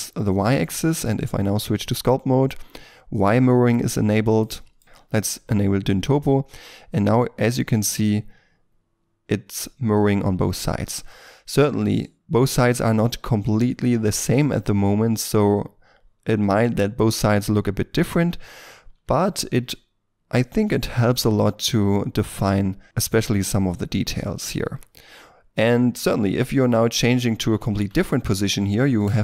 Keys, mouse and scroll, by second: 0.5 Tab, 5.1 middle click, 18.7 middle click, 19.2 shift+middle click, 25.1 middle click, 26.2 shift+middle click, 27.7 shift+middle click.